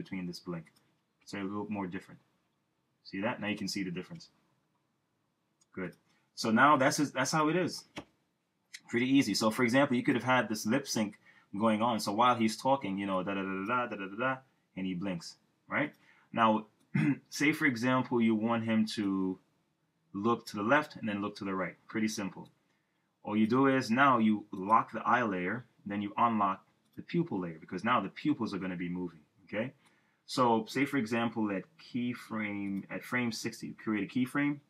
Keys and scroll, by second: 1.2 Return, 4.2 Return, 8.0 Return, 13.8 Return.